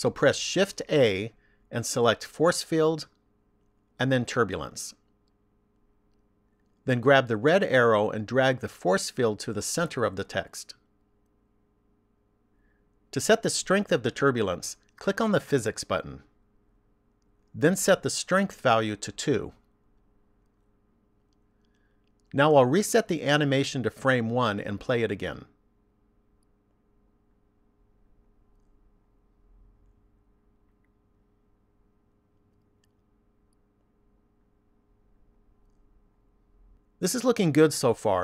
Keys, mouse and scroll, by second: 0.3 shift+a, 8.5 click, 16.7 click, 19.6 click, 24.6 click, 27.0 click.